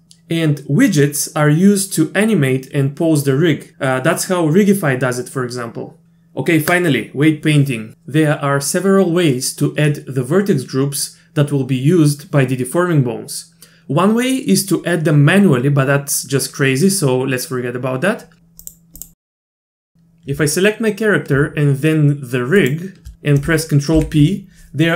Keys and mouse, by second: 18.7 click, 22.6 shift+click, 24.0 ctrl+p.